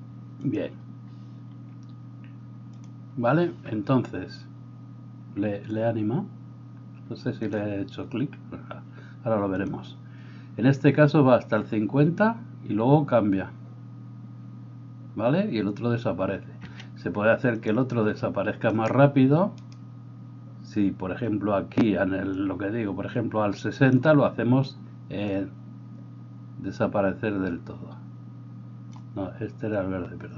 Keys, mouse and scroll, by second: 7.5-30.3 middle drag, 7.5-30.3 right drag, 16.7 Escape.